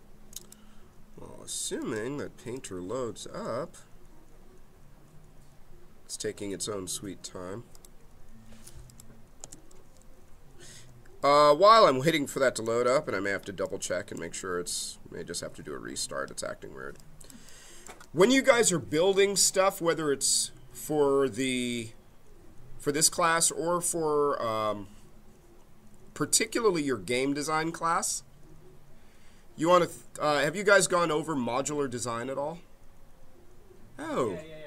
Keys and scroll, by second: 9.3 space.